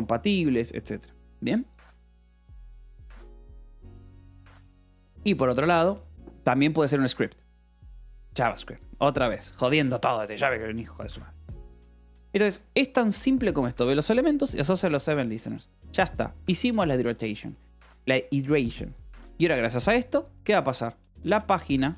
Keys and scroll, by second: 6.1 Escape, 8.2 shift+v, 9.3 Escape, 10.6 shift+g, 13.5 shift+v, 15.2 Escape, 19.4 Escape, 19.5 o, 20.1 Return, 21.2-21.9 typing.